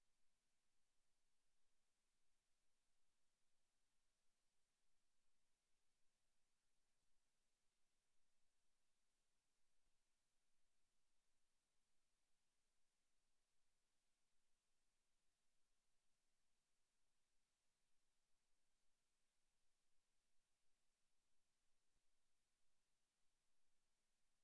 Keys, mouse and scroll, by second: 0.0 shift+middle click, 0.9 shift+middle click, 1.5 g, 2.1 click, 2.4 shift+middle click, 3.1 g, 4.3 click, 4.7 KP_0, 6.1 click, 6.8 KP_3, 7.3 shift+middle click, 8.9 click, 11.1 KP_0, 13.1 click, 15.1 click, 18.1 click, 22.9 click, 24.3 click.